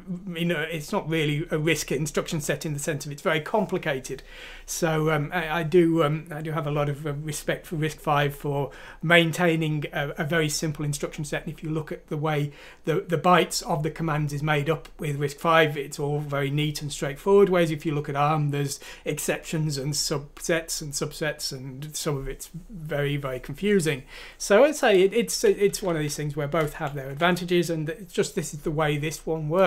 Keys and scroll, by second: 26.6 shift+Home, 27.0 shift+Delete.